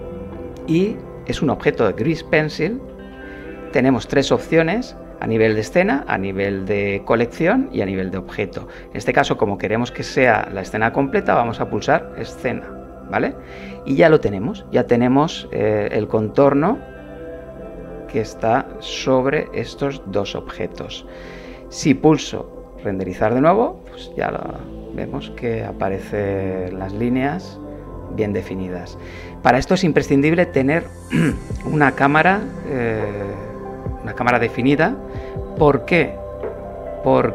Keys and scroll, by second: 21.9 F12.